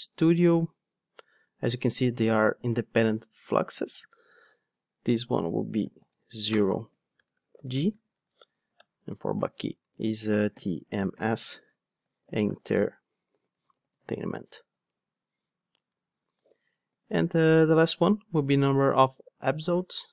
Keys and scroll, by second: 8.8 alt+shift+Right, 16.9 super+d.